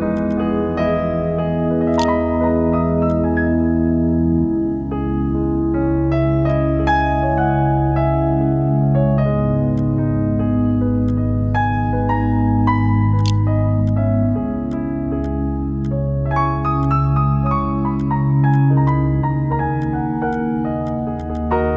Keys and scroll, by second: 0.9-1.8 typing, 2.2 ctrl+f, 12.2-13.2 typing.